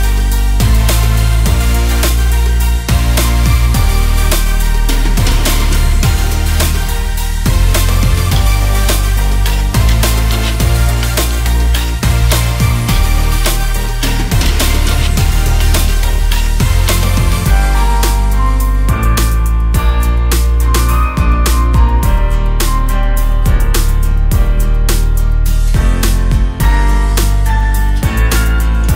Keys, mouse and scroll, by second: 2.4-5.5 drag, 6.3-10.4 drag, 11.7 click, 12.3 scroll up 2, 12.7-13.9 scroll down 1, 13.9-14.4 scroll up 1, 14.4-14.9 drag, 14.9-15.6 scroll down 1, 15.6-16.1 drag, 16.1-16.6 scroll up 2, 16.6 click, 17.7 s, 19.2 click, 20.3 click, 22.6 click, 23.7 click, 24.3 s, 25.2 click, 25.5-25.9 scroll up 2, 25.9 click, 26.2 click, 26.5-27.2 right drag, 27.2 click, 28.0 click, 28.7 click.